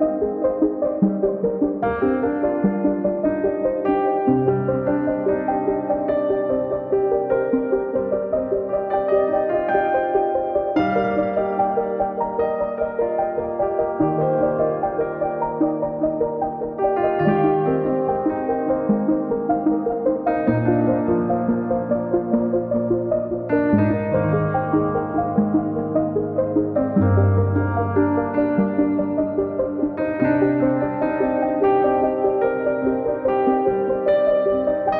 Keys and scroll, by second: 0.8 space, 4.0 l, 5.5 space, 6.0 q, 8.4 space, 9.5 Delete, 15.1 f, 16.2 2, 16.5 Return, 17.1 l, 20.3 space, 21.9 Delete, 25.0 m, 26.4 Return, 27.0 r, 28.8 space, 29.9 l, 31.5 3, 31.9 Return.